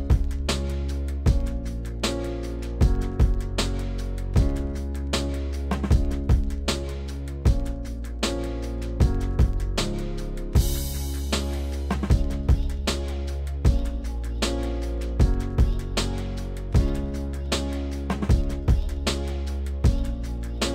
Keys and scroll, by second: 6.5 s.